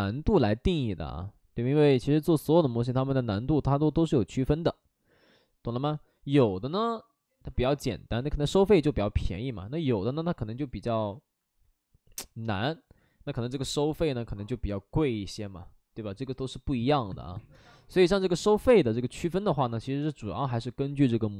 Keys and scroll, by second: 12.0 ctrl+n.